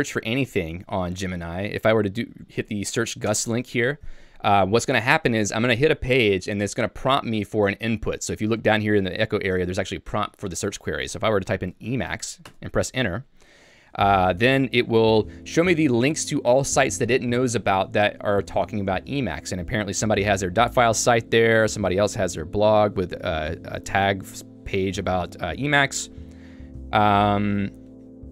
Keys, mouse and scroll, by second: 0.7 l, 2.1 k, 2.4 j, 3.3 Return, 12.5 Return, 15.5 j, 22.0 k, 22.5 j, 26.1 ctrl+d.